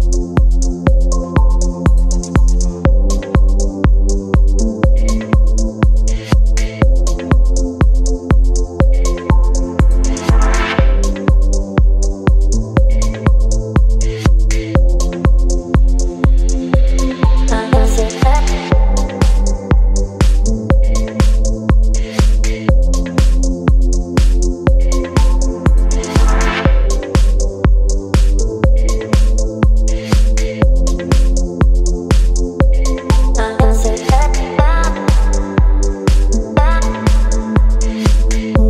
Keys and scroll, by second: 2.3 b, 12.1 Delete, 14.0 ctrl+BackSpace, 15.6 space, 17.5 Delete, 18.9 Delete, 19.4 space, 20.3 Return, 21.2 ctrl+BackSpace, 22.2 space, 23.0 v, 23.4 space, 24.2 v, 25.4 space, 27.5 Delete, 29.7 Delete, 32.6 Delete, 33.3 Delete, 35.1 Delete, 36.4 Delete, 36.9 Delete.